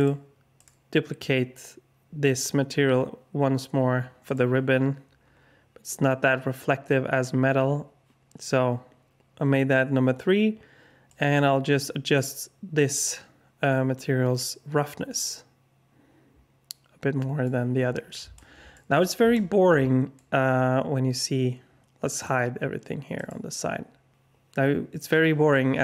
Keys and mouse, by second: 0.5 click, 11.2-17.5 drag, 18.3-18.7 alt+shift+middle drag, 19.3-20.1 alt+shift+middle drag, 22.2-23.2 drag.